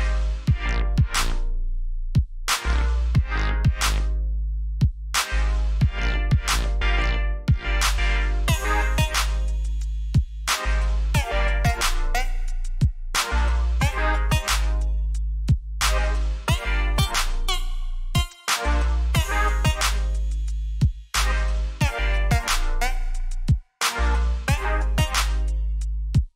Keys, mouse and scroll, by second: 2.3 click, 5.4 right click, 7.6 click, 10.4-11.3 alt+scroll up 4, 11.5 scroll down 1, 12.3 alt+scroll up 1, 12.8-13.7 alt+scroll down 3, 14.3-14.7 scroll up 1, 15.3 scroll down 1, 16.5 scroll up 1, 17.2 scroll up 1, 17.8-18.2 scroll down 1, 20.8 click, 24.0 right click, 25.3 click.